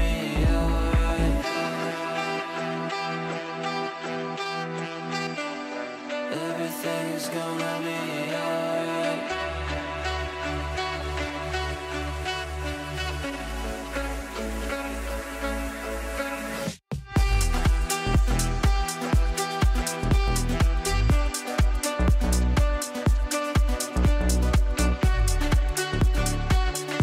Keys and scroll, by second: 16.8 Delete.